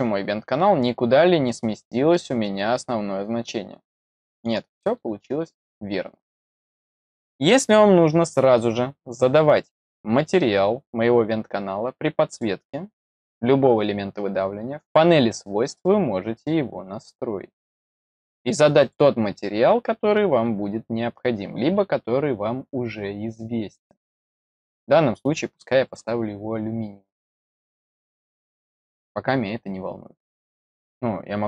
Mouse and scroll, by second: 12.2 click, 15.6 click, 18.7 click, 21.7 middle click, 22.2-24.0 middle drag, 25.8 click, 27.3 click, 28.8 click.